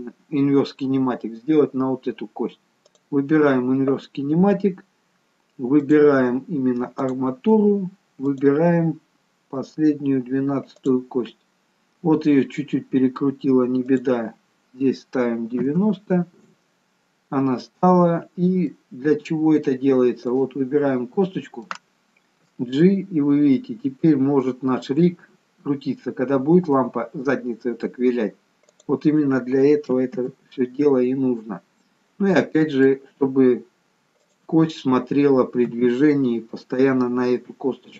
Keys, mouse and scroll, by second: 3.0 click, 5.9 click, 14.1 click, 18.9 middle click, 19.8-20.5 scroll down 1, 20.5 click, 21.2 scroll up 1, 21.3 middle click, 22.6 g, 30.5 ctrl+z, 31.6 middle click, 34.3 click, 35.8 KP_3.